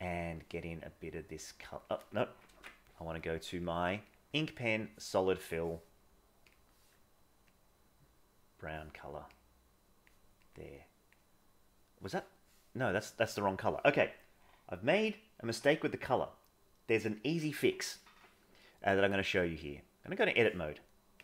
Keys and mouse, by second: 0.1 middle click, 0.9 click, 2.5 ctrl+z, 3.5 click, 7.5-8.6 drag, 9.3 click, 10.5 click, 12.6 middle click, 19.0-20.3 drag.